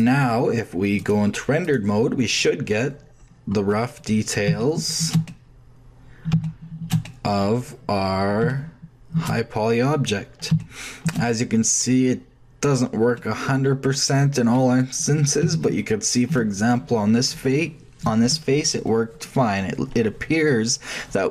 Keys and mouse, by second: 0.0 click, 0.8 middle click, 1.0-2.9 drag, 3.3-4.5 middle drag, 10.5 shift+click, 12.9 shift+click, 16.1 middle click, 16.5-17.5 drag.